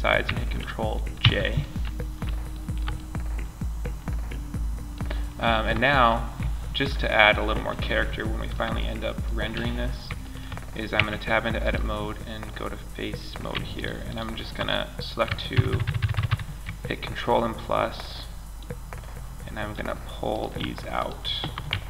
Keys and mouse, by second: 0.6 ctrl+j, 2.0-2.3 middle drag, 10.3 Tab, 13.0 right click, 14.9 ctrl+KP_Add, 19.6 right click, 21.2 ctrl+KP_Add.